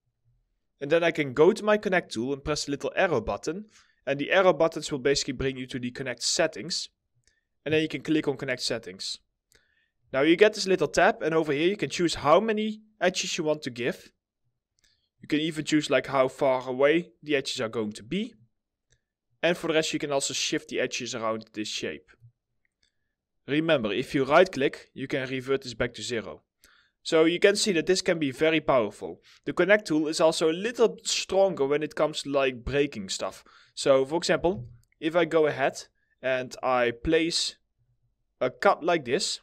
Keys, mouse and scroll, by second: 9.5 middle click, 10.3 alt+middle click, 24.4 right click, 28.0 alt+middle click, 30.8 alt+middle click, 33.4 middle click, 34.6 ctrl+z.